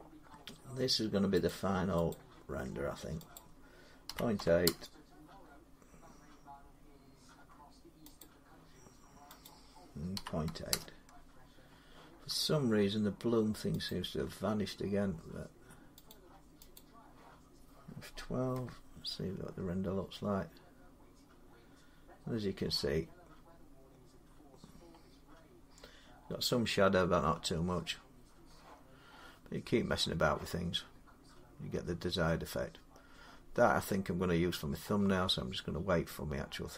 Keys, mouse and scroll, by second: 1.3 click, 1.9 click, 2.1-2.9 typing, 3.1 click, 3.9-4.4 typing, 8.0 click, 9.2 click, 9.7-10.5 typing, 13.1 Return, 13.7 click, 15.9 click, 16.6 click, 18.3 F12, 24.4 middle click, 28.7 scroll down 2, 30.5-31.5 scroll up 4, 31.5-32.1 scroll down 4, 32.9-35.6 scroll.